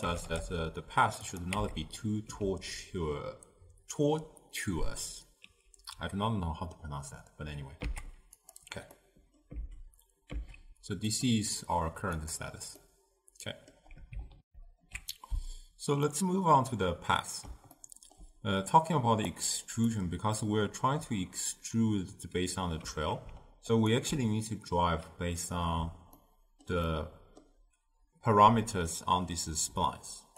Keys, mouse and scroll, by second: 0.2 g, 1.7 Tab, 7.9 z, 9.0-9.7 middle drag, 9.7 z, 10.4 z, 12.2 click, 12.9 scroll up 2, 12.9-14.5 middle drag, 14.5 ctrl+alt+shift+q, 16.1-19.3 middle drag, 19.3-22.3 drag, 23.7 alt+shift+click, 26.2-29.9 ctrl+middle drag.